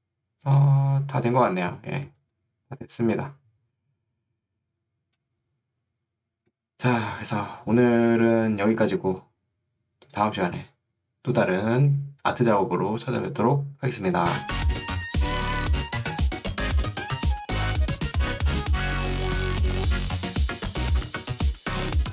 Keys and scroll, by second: 2.1 ctrl+2, 3.7 Escape.